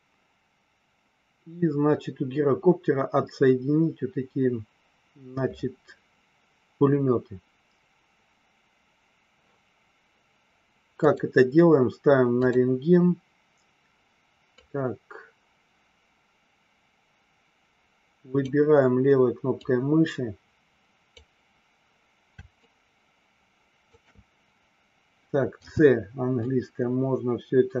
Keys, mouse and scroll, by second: 11.0 click, 12.3 click, 14.6-18.4 drag, 19.6-21.2 drag, 22.7-24.0 shift+drag, 25.6 c.